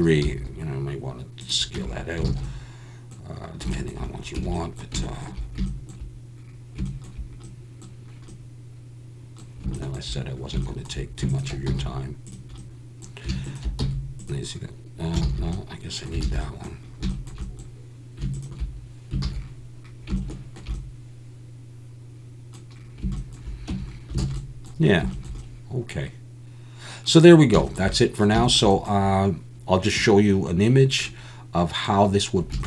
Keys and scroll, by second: 0.2 s, 1.8 Tab, 2.3 alt+a, 4.4 Tab, 11.7 x, 13.8 x, 15.3 ctrl+z, 16.2 alt+a, 23.7 Tab, 24.3 alt+a.